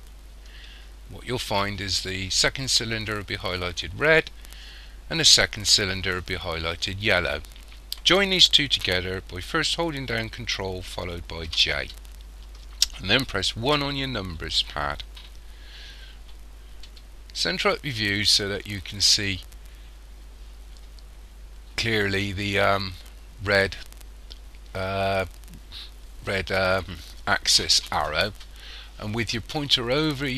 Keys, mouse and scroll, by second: 11.5 ctrl+j, 13.7 KP_1, 17.5 shift+middle click, 19.4-20.1 scroll up 3, 20.8-21.2 scroll up 2.